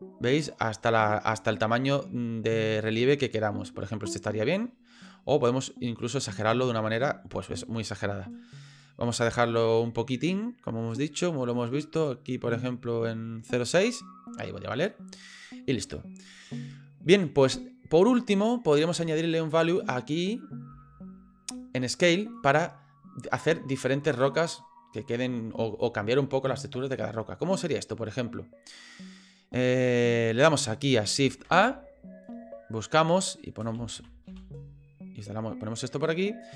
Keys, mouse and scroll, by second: 31.4 shift+a.